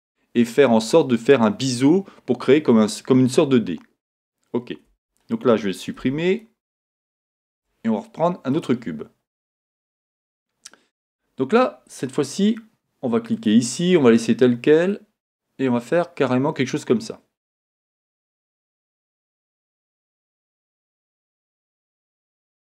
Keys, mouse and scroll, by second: 4.9 Tab, 6.0 x, 7.5 shift+a, 9.1-10.0 scroll up 2, 10.0 Tab, 13.3-14.4 drag, 14.9-19.3 drag, 19.3-22.7 middle drag.